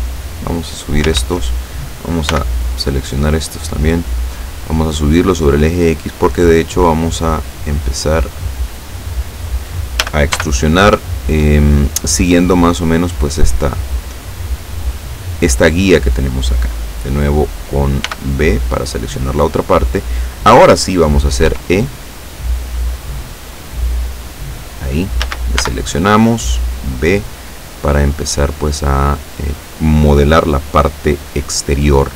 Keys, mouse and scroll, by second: 1.2 ctrl+z, 2.3 b, 2.9-4.1 drag, 4.7-9.3 drag, 10.1 a, 10.4 b, 11.0 click, 12.5-14.1 drag, 18.1 b, 18.3 click, 21.5 e, 24.6 click, 25.3 a, 25.7 b, 26.5 click, 27.9-29.5 drag.